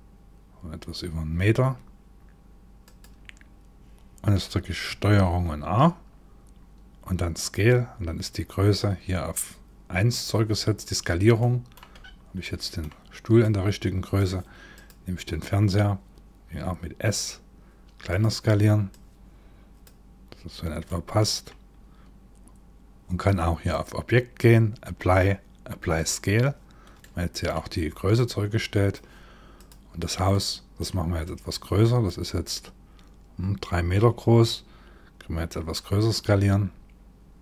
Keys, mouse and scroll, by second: 5.0 ctrl+a, 11.0 middle click, 11.6-12.2 scroll down 5, 12.0 middle click, 13.0 click, 14.4 click, 16.2 s, 18.5 click, 19.8-20.4 scroll up 2, 20.4 scroll up 1, 20.5 middle click, 23.3 click, 26.6 middle click, 27.8 click, 29.2 click, 29.6-29.9 scroll down 4, 29.9 middle click, 30.8 click, 35.1 s.